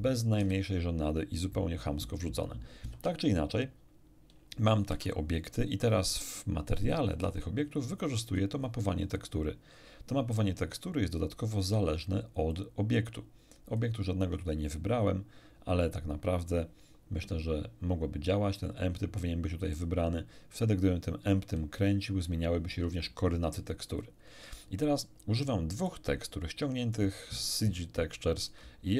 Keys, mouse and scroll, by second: 0.4 a, 2.9 shift+F5, 4.9 Tab, 7.1 shift+F3, 8.0 shift+middle click, 11.5 click, 12.5-14.0 drag, 17.2 click, 22.7 Escape, 23.9-24.4 scroll down 1, 24.8-26.0 middle drag, 27.2 click.